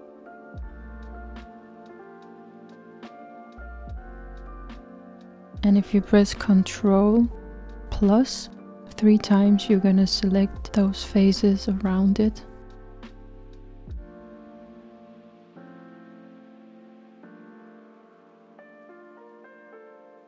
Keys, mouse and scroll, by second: 3.4-4.2 scroll up 1, 4.2-5.3 scroll up 3, 5.3-7.6 scroll up 1, 9.1 ctrl+KP_Add, 10.2 ctrl+KP_Add, 12.2 ctrl+KP_Add.